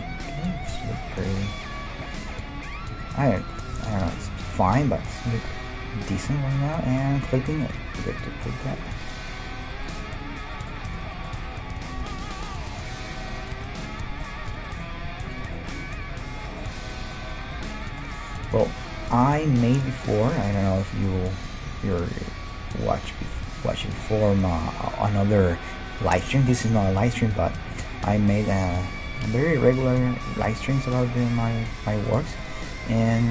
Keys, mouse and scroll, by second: 2.6-5.6 right drag, 3.3-5.8 middle drag, 4.7 e, 7.3-9.0 drag, 7.5-13.0 middle drag, 7.9 g, 9.6-11.4 right drag, 11.4 g, 12.6 g, 13.0 right click, 13.4-23.1 middle drag, 15.1 g, 16.8-19.0 right drag, 19.9-22.6 right drag, 21.6 g, 23.6-25.3 right drag, 23.8-29.2 middle drag, 24.0 g, 28.1-31.7 right drag, 30.4 g, 31.7-33.3 middle drag, 32.7 g.